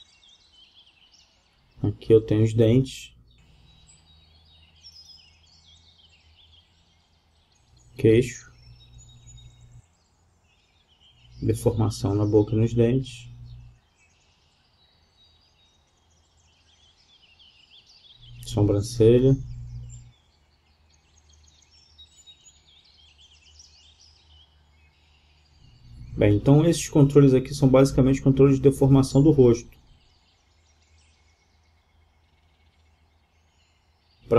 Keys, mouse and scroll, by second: 2.0-3.6 right drag, 2.9 g, 3.6 click, 5.5-7.2 drag, 6.3 g, 9.6-11.3 right drag, 10.3 g, 13.0-14.7 right drag, 13.7 g, 17.3 middle click, 17.3-19.0 drag, 18.0 g, 21.3-22.6 drag, 22.6-23.5 right drag, 22.6 g.